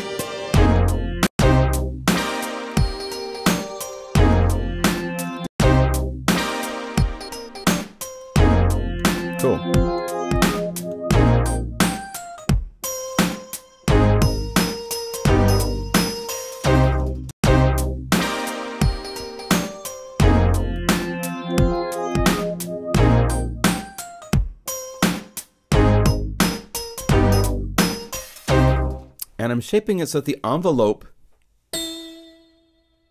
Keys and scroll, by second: 1.1 Home, 5.3 Home, 18.3 Home, 28.5 0.